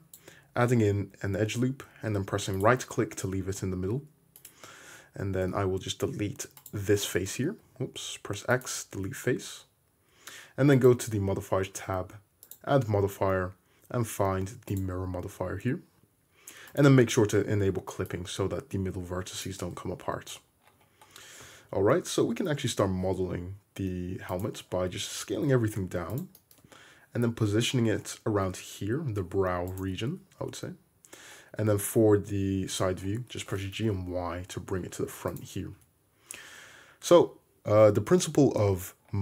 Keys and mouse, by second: 4.0 3, 4.4 click, 5.5 x, 7.5 x, 12.6-16.8 drag, 14.8-16.8 right drag, 16.8-18.1 middle drag, 17.7 1, 18.1-26.3 drag, 19.6 ctrl+z, 21.4 a, 22.2 s, 25.4 s, 26.3 shift+middle click, 26.6-39.2 drag, 27.2 g, 30.4 `, 33.4 g, 35.8 `.